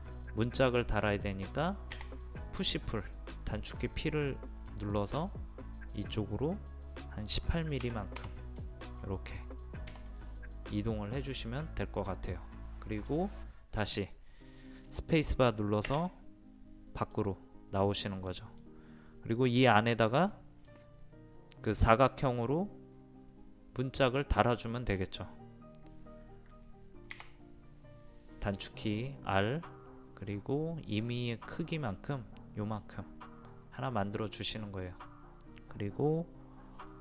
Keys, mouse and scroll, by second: 2.0 p, 5.8 click, 7.8 KP_1, 8.2 KP_8, 16.4 space, 17.0 click, 18.1-21.4 middle drag, 27.1 r, 28.7 click, 33.8 middle click, 34.3-34.7 scroll up 1.